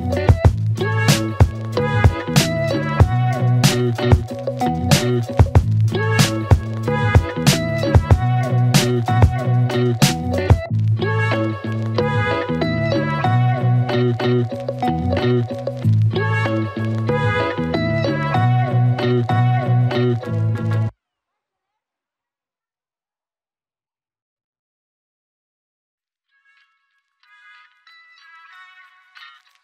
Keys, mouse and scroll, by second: 6.2 click, 7.6-8.7 typing, 9.5-11.3 click, 13.2 Return, 15.8 click, 19.4-23.3 drag, 26.0-26.8 click, 27.8 space.